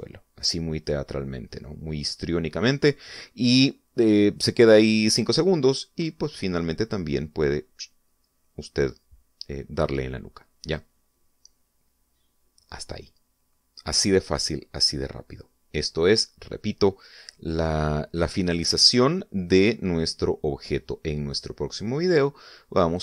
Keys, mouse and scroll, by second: 11.9 click.